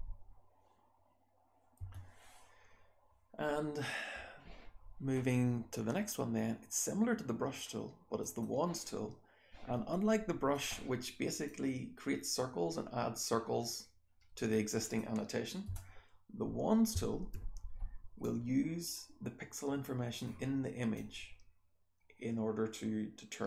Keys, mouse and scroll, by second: 0.4-1.8 scroll down 1, 1.8-3.1 scroll down 1, 1.9 BackSpace, 8.1 click, 8.4-10.5 scroll down 1, 10.5 click, 10.5-11.1 scroll down 1, 11.1-12.4 scroll down 1, 11.4-14.9 drag, 12.4-13.8 scroll down 1, 13.8-14.9 scroll down 1, 14.9-15.6 scroll down 1, 15.6-16.4 scroll down 1, 15.6 BackSpace, 16.4-17.8 scroll down 1, 16.9 w, 17.8-19.1 scroll down 1, 18.2-20.1 drag, 19.1-20.1 scroll down 1, 20.1 scroll down 1, 20.4-21.8 scroll up 1, 20.9-23.4 drag, 21.8-23.1 scroll up 1, 23.1-23.4 scroll up 1.